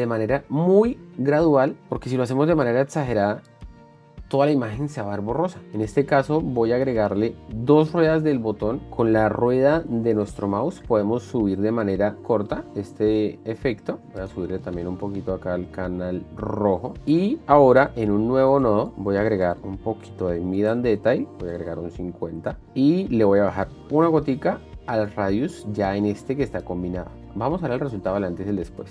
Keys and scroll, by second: 18.2 alt+s, 27.3 shift+d.